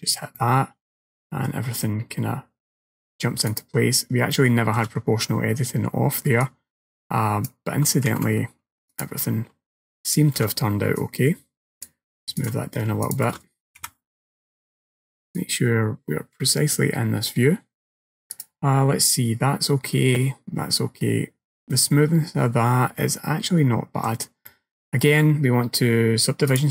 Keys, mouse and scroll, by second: 0.4 middle click, 3.5 click, 4.4 shift+middle click, 6.5 click, 8.2 ctrl+z, 9.0 alt+click, 10.1 alt+shift+click, 11.0 click, 12.4 alt+click, 13.1 alt+shift+click, 13.9 KP_1, 14.6-15.4 scroll up 1, 15.4 click, 15.4-16.0 scroll up 1, 18.4 click, 22.7-23.8 scroll down 2, 23.0 middle click, 24.5 middle click, 26.6 click.